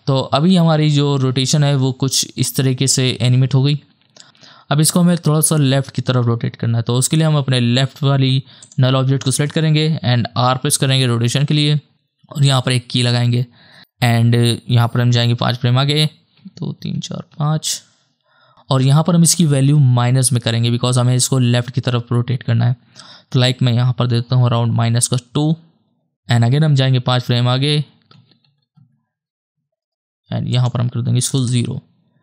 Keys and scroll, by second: 10.6 r, 15.9 ctrl+Right, 16.7 Right, 24.0 KP_2, 24.6 Return, 27.1 ctrl+Right, 27.7 ctrl+Right, 28.4 ctrl+Right, 31.4 KP_0.